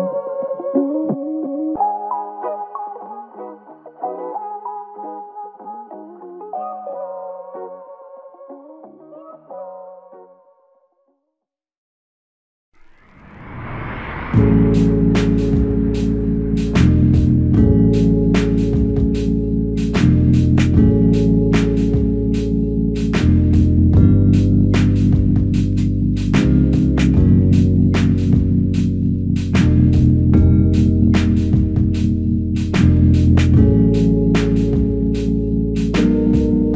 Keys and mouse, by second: 5.8 double click, 12.2 double click, 17.0 alt+click, 22.3 shift+click, 23.8 shift+click, 27.2 alt+click, 28.8 shift+click, 35.4 double click.